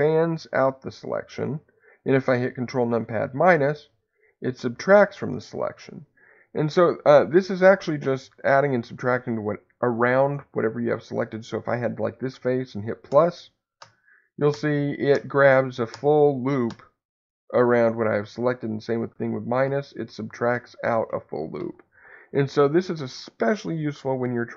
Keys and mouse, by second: 3.0 ctrl+KP_Subtract, 7.2 3, 13.1 ctrl+KP_Add, 19.1 ctrl+KP_Subtract, 19.6-21.8 ctrl+KP_Subtract.